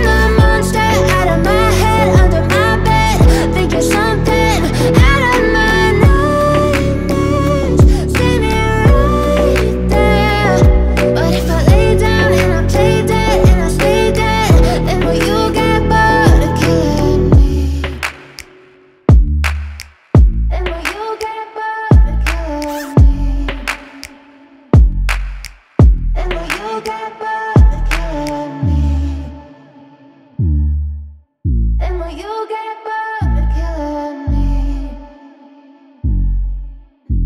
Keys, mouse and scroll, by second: 0.1 click, 1.8-3.4 drag, 3.4 ctrl+z, 6.6-9.2 drag, 10.8-12.2 drag, 12.2 ctrl+z, 13.4 click, 14.9-16.1 drag, 16.1 ctrl+z, 17.7-18.7 drag, 22.2-33.0 drag, 33.0 KP_0, 35.6-36.1 scroll down 2, 36.1 space.